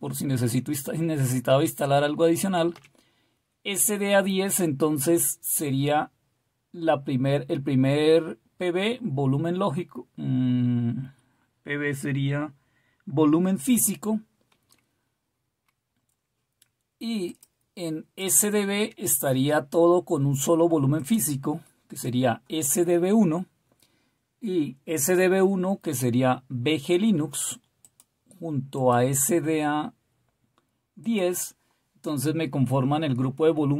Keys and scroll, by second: 2.7 Down.